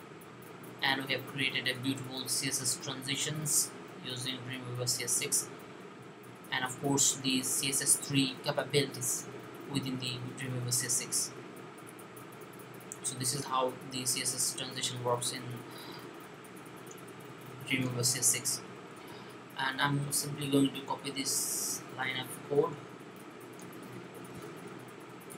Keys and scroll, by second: 25.1 super+c.